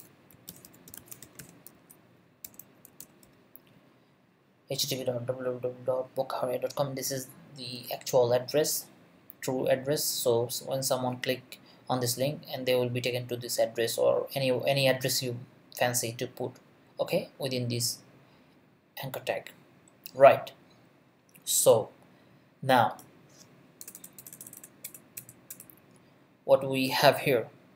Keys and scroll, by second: 0.0-3.7 typing, 23.8 BackSpace.